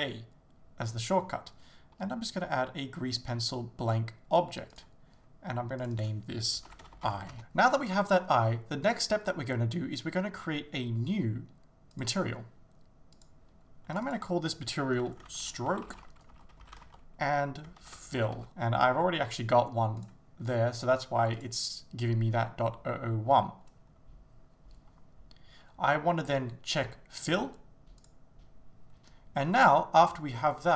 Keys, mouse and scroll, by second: 6.8-20.1 drag, 20.5 click, 28.0-29.3 drag.